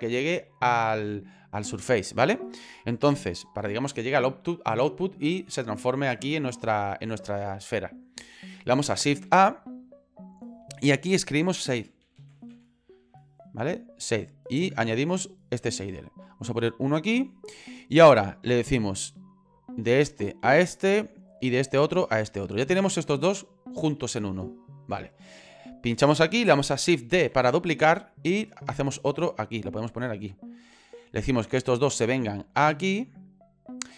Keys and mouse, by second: 9.1 shift+a, 19.0-20.5 drag, 21.2-22.3 drag, 24.6-26.6 drag, 27.1 shift+d, 30.3 click, 32.4-33.7 drag.